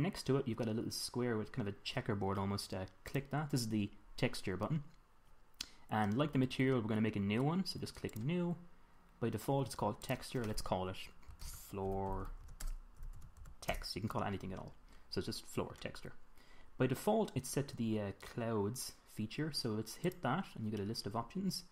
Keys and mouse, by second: 3.5-5.3 drag, 8.5-10.4 drag, 10.5-12.4 drag, 12.6 o, 20.4-21.7 drag.